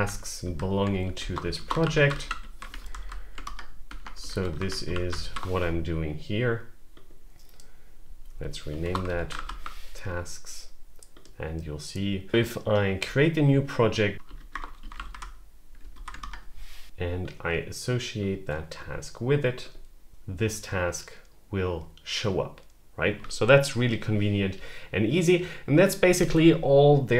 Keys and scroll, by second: 0.3 Down, 0.7-2.8 typing, 2.8 Down, 3.3 Return, 4.0-5.7 typing, 8.4-9.8 typing, 13.9-15.4 typing, 15.8 Down, 16.0 Return.